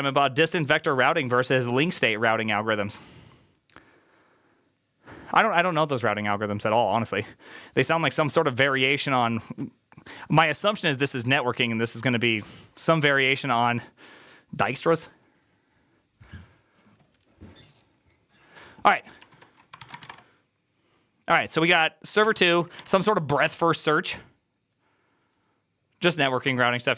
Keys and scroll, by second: 19.6-23.1 typing.